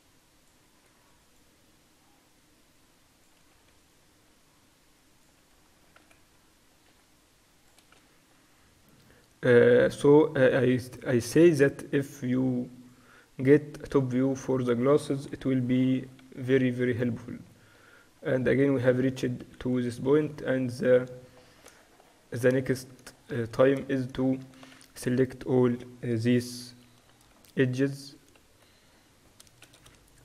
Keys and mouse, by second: 0.5 click, 0.9 a, 1.9-3.9 middle drag, 3.9 right click, 6.1 right click, 6.1 z, 7.0 c, 8.1 z, 8.6-10.5 drag, 10.6-15.3 drag, 14.2 Tab, 14.5-17.0 middle drag, 15.4 KP_7, 17.0 Tab, 18.2 middle click, 19.1-20.1 typing, 22.2 middle click, 23.5 middle click, 24.7 Tab, 24.9 z, 26.3 KP_4, 26.4 KP_4, 26.8 KP_2, 27.0 KP_2, 28.8 z, 29.8 z.